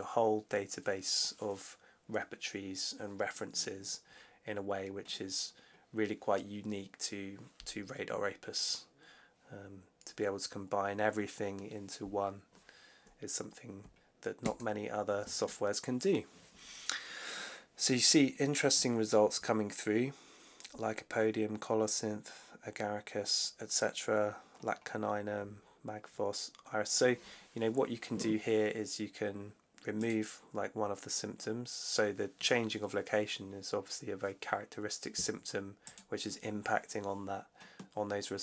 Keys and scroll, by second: 14.3 super+F2.